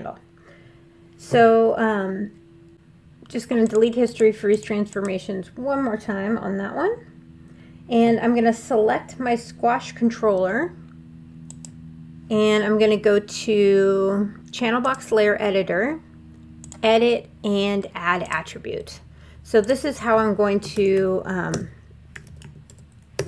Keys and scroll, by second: 20.5-23.2 typing.